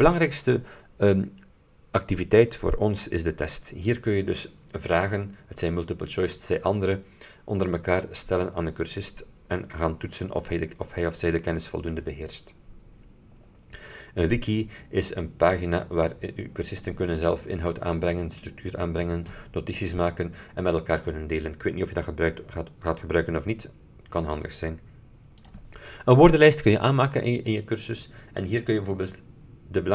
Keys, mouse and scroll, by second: 14.3 click, 25.5 click.